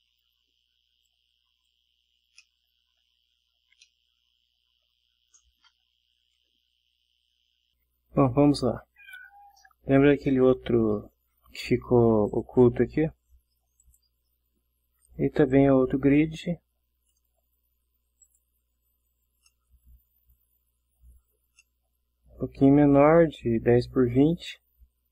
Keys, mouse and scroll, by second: 1.0-1.8 drag, 2.4-3.1 middle drag, 3.8-5.0 middle drag, 12.3 click, 13.9 click, 15.6-17.4 drag, 18.3 click, 19.3 scroll up 1, 19.5-21.6 middle drag, 21.7-22.5 ctrl+middle drag, 22.5 ctrl+scroll down 1.